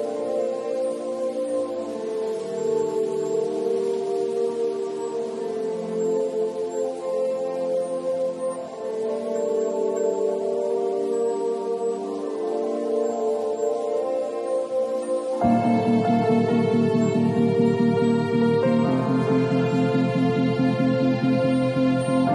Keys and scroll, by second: 14.5-16.0 typing.